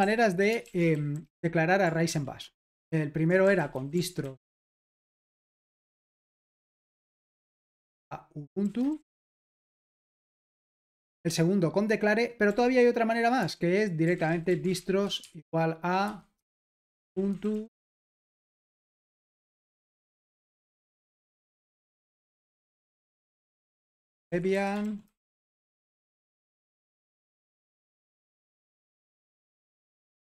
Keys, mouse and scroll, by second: 0.0-2.1 typing, 0.6 super+l, 3.4-9.6 typing, 10.0 Escape, 10.6 Return, 13.3-29.2 typing, 26.5 Escape.